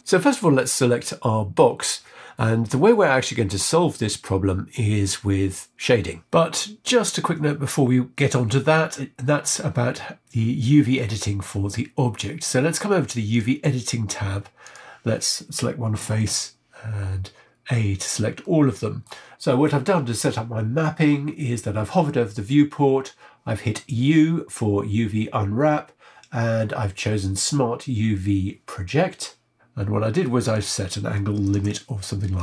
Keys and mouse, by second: 14.6 click, 18.4 middle click, 18.4 a, 22.5 u.